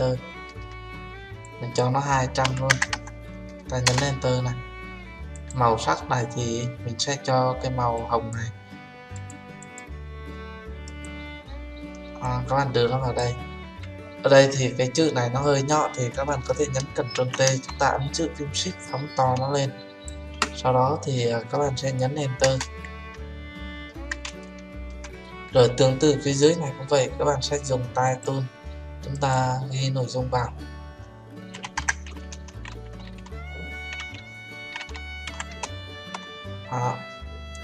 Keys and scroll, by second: 17.1 ctrl+t, 22.4 Return.